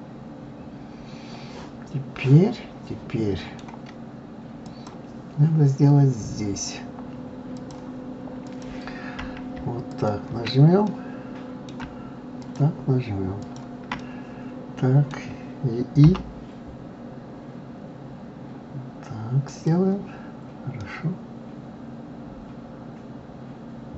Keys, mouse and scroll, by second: 4.6 click, 7.5 click, 8.4 click, 9.8 shift+click, 10.8-12.4 middle drag, 12.4 shift+click, 13.4 shift+click, 13.9-16.0 middle drag, 16.0-16.5 scroll, 20.8-23.8 middle drag.